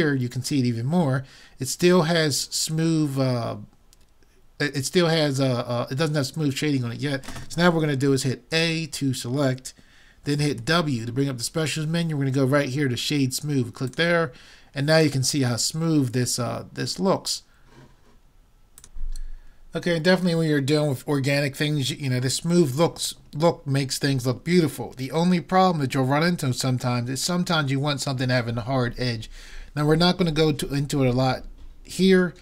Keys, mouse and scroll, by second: 8.6 a, 10.6 w.